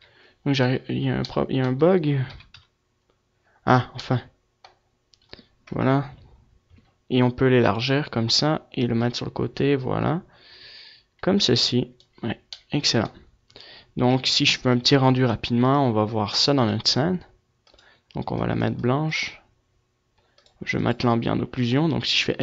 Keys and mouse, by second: 2.0 KP_3, 2.3 KP_Decimal, 5.4 KP_0, 7.2-10.3 drag, 10.6 middle click, 11.7 middle click, 13.0 a, 13.6 KP_0, 15.0-16.0 drag, 16.2-20.9 drag.